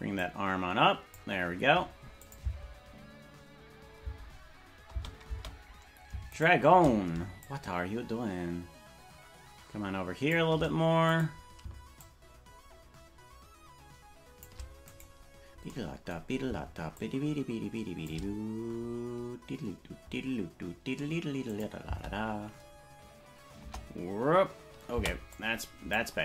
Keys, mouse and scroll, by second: 0.2-1.2 drag, 2.2-4.2 shift+drag, 2.4 space, 4.1 space, 5.3 space, 6.5 shift+right click, 7.4-10.4 shift+drag, 11.2 right click, 12.0-14.5 shift+drag, 15.0 right click, 16.9-18.1 shift+drag, 18.4 scroll down 3, 18.4 scroll up 2, 18.5-18.9 scroll down 2, 18.8-21.5 scroll up 2, 21.5 click, 21.8 space, 23.6 KP_0, 24.9 space, 25.3 click.